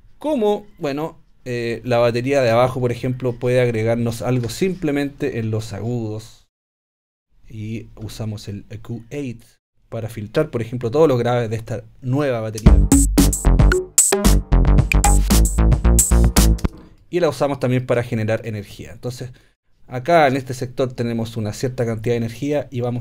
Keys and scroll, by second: 4.4 BackSpace, 12.6 space, 16.6 space.